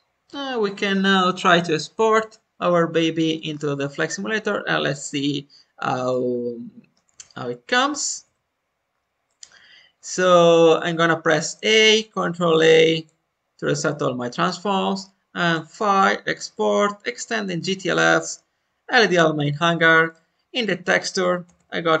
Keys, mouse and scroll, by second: 3.4-4.1 scroll down 2, 6.0-7.0 middle drag, 6.0-6.4 scroll down 1, 8.2 middle click, 8.8 scroll down 1, 9.2-10.2 middle drag, 10.2 a, 11.0-11.7 scroll down 2, 12.0 ctrl+a, 15.4-22.0 drag.